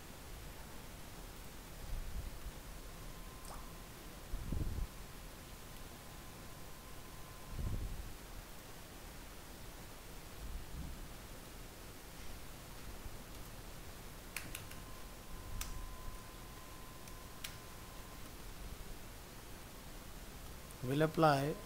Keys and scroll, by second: 2.4 ctrl+shift+End, 7.7 ctrl+s, 15.6 ctrl+space.